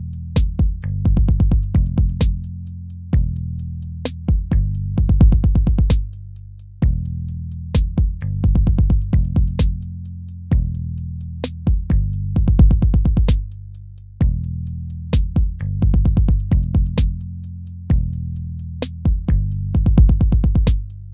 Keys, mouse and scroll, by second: 18.3 right click.